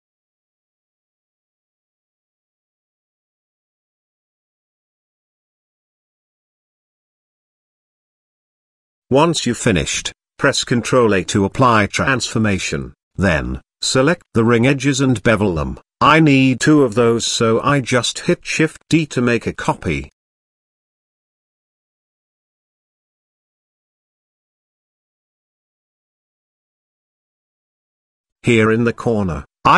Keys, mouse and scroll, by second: 0.5 ctrl+z, 0.6 ctrl+z, 1.0 middle drag, 1.7 i, 3.1 e, 4.2 middle click, 5.2 shift+middle click, 7.0 click, 8.0 ctrl+b, 10.7 Tab, 11.3 ctrl+a, 12.0 Tab, 12.5 ctrl+b, 14.2 Tab, 14.9-15.9 middle drag, 16.3 middle click, 16.9 g, 19.3 shift+d, 23.3-24.5 middle drag, 25.6-26.5 middle drag, 28.2 click, 28.7 shift+a.